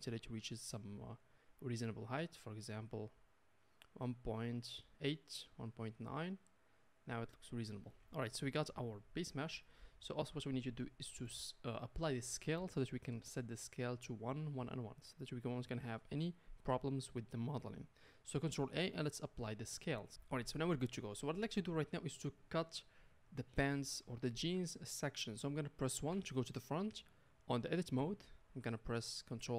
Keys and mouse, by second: 9.4 KP_Decimal, 18.6 ctrl+a, 26.1 KP_1, 27.7-29.5 middle drag, 28.0 Tab.